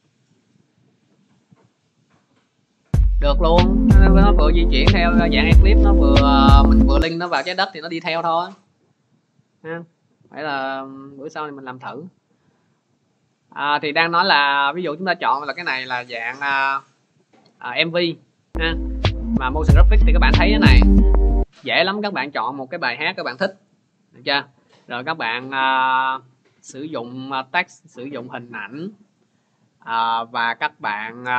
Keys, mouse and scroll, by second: 1.0 click, 6.8 click, 8.4 click, 11.4 click, 16.2 click, 17.2 click, 26.2 click.